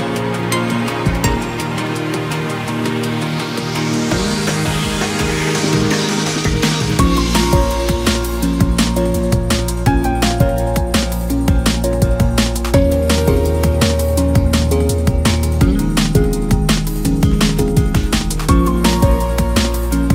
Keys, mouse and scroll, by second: 0.6 middle click, 1.1-1.6 scroll up 1, 1.6 ctrl+b, 4.4 a, 4.7 middle click, 5.4 s, 6.2 s, 7.0 Tab, 7.1 scroll down 3, 7.3 middle click, 7.7 KP_1, 7.9 Tab, 8.1 scroll up 2, 8.4 g, 9.5-10.3 scroll down 8, 9.7 Tab, 10.3 shift+middle click, 10.9 click, 11.7-15.6 drag, 15.6-16.1 scroll up 2, 16.1 shift+middle click, 16.5 scroll up 1, 17.4-20.1 drag.